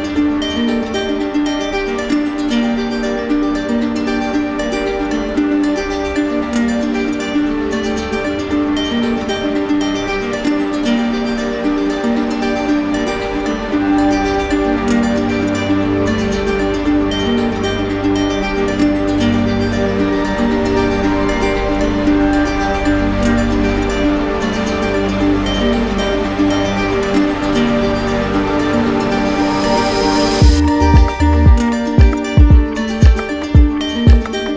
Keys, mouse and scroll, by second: 3.1 click, 5.5 click, 13.4-14.5 drag, 15.3-16.4 drag, 21.2 z, 22.0 click, 25.2 right click, 25.8 click, 26.1 click, 26.5 click, 27.1 right click, 28.5 click, 29.9 click, 30.7 click, 31.0 right click, 31.6 shift+click, 32.4 shift+click, 32.8 shift+click, 33.3 shift+click.